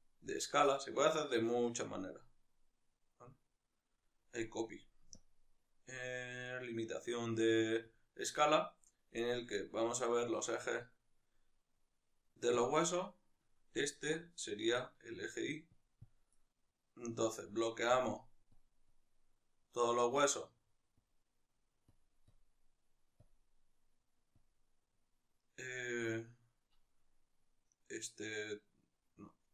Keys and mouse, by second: 0.4-12.6 drag, 13.6-17.6 middle drag, 17.6 click, 19.0 click, 22.0 drag, 23.4-24.5 drag.